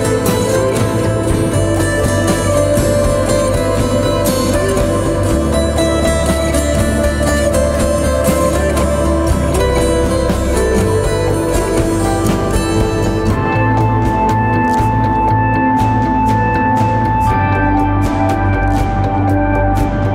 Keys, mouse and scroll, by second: 9.3 alt+click, 15.4 right click, 17.4-18.3 typing, 18.7 double click.